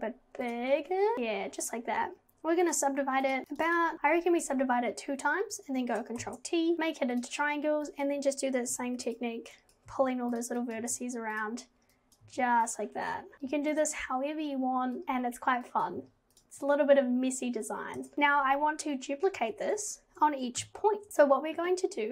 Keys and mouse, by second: 3.4 click, 3.5 click, 3.7 click, 6.2 ctrl+t, 7.2 click, 8.0 click, 8.7 g, 9.7 click, 9.9 g, 10.6 click, 10.8 g, 12.1 click, 12.3 g, 13.3 g, 15.0 click, 15.0 g, 15.8 click, 16.0 g, 18.0 Tab, 20.6 KP_7.